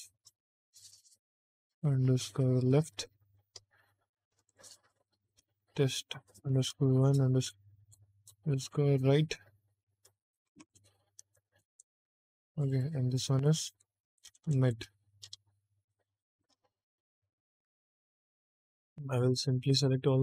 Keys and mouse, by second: 4.3 click, 4.5-11.6 drag, 7.7 BackSpace, 12.4 click, 12.6-17.0 drag, 14.2 BackSpace, 14.4 BackSpace, 18.2 click, 18.4 click, 19.1 click.